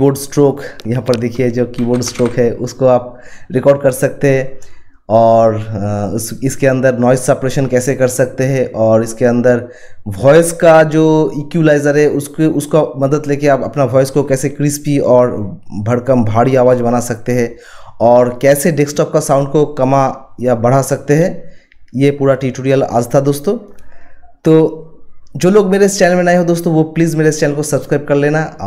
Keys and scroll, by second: 1.4-2.7 typing.